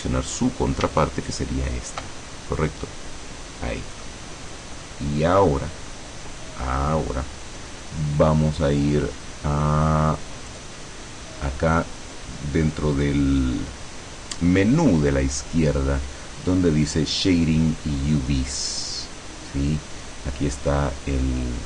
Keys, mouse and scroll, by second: 1.4 alt+shift+right click, 2.4-2.8 alt+shift+scroll down 3, 2.8-4.3 middle drag, 4.5-4.9 scroll up 2, 4.9 scroll down 2, 5.3 middle click, 10.6 click.